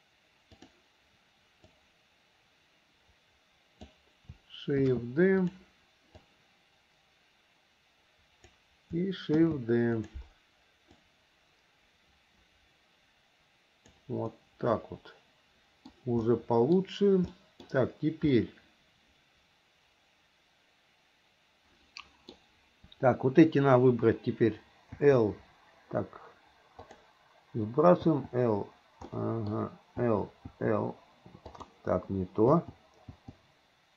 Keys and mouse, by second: 0.8 click, 1.8 click, 2.1-4.1 drag, 5.0 shift+d, 6.4-8.7 drag, 9.5 shift+d, 11.1-14.1 drag, 14.5-16.1 middle drag, 16.4 middle click, 17.5 middle click, 18.5-22.5 middle drag, 25.1 l, 27.0 click, 28.3 l, 29.3 middle click, 30.2 l, 30.7 l, 32.7 click, 33.3 click.